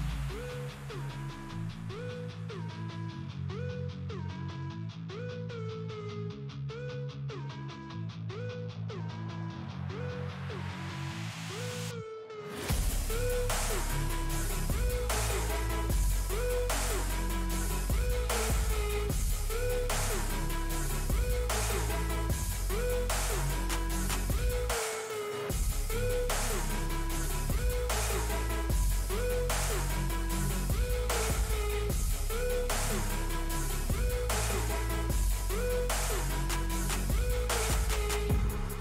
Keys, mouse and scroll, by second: 3.5 shift+right click, 3.9 scroll down 1, 5.8 scroll up 1, 14.8-15.8 scroll down 1, 16.4-20.2 drag, 22.8 click, 23.4 scroll up 1, 24.2 click, 26.0 scroll down 1, 26.4 space, 27.1-30.4 drag, 30.4 scroll up 1, 31.2-34.3 drag, 34.3-34.9 scroll down 1, 35.0 scroll up 1, 35.5 scroll down 1, 36.5-38.4 drag, 38.4 scroll up 1.